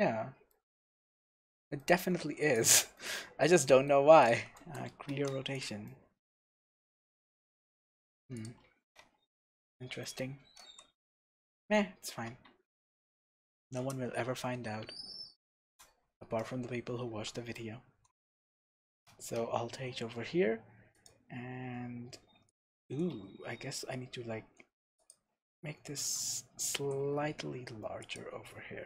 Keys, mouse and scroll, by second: 1.3-1.8 scroll down 1, 2.0 scroll down 1, 2.2 Tab, 2.5 click, 2.9 scroll up 1, 3.0-4.2 middle drag, 4.2 shift+click, 5.1 ctrl+r, 5.5 click, 5.9-8.4 middle drag, 6.5-6.9 scroll up 2, 7.5 scroll down 2, 7.6 scroll up 2, 8.4 click, 8.7 ctrl+r, 9.4-9.7 scroll down 1, 9.7-10.0 scroll up 1, 10.0-12.9 middle drag, 10.6 m, 11.8-12.1 scroll down 1, 12.1 Tab, 12.9 click, 13.2-13.7 scroll down 1, 13.8 KP_0, 14.6-15.1 scroll down 1, 16.7 scroll up 1, 17.1 shift+z, 18.7 alt+h, 20.9 click, 21.7 scroll up 1, 22.5 click, 23.1 h, 23.8-25.1 scroll up 2, 25.1 click, 26.0 s, 28.2 click.